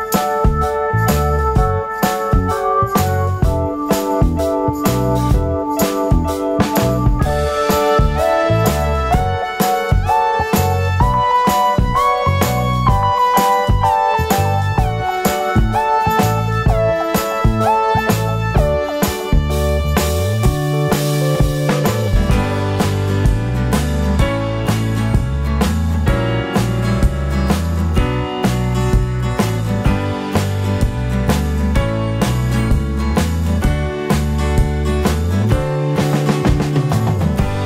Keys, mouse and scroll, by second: 0.4 `, 1.2 scroll up 1, 1.3 `, 1.6-2.0 scroll down 1, 2.0 `, 2.8 click, 4.9 alt+a, 4.9-7.0 drag, 5.0 `, 7.9 `, 8.2 scroll up 1, 8.4 `, 9.0 click, 9.4 `, 11.1-11.9 scroll down 1, 12.8 `, 14.5 click, 17.6 alt+a, 17.6 `, 17.9 scroll down 1, 18.0 `, 18.4 scroll up 1, 18.6 `, 20.0 click, 20.5 Tab, 21.0 click, 21.3 shift+click, 21.7 KP_Decimal, 23.5 shift+d, 24.0 KP_Decimal, 24.4 `, 25.0 e, 26.0 click, 26.4 s, 27.4 click, 28.5 alt+click, 29.2 `, 29.9 alt+shift+click, 30.1 `, 30.7 alt+shift+click, 32.2 ctrl+e, 33.0 Tab, 33.4 scroll down 1, 33.8 alt+a, 34.1 `, 34.6-35.0 scroll up 1, 35.0 Tab, 35.7 l, 37.2-37.6 drag.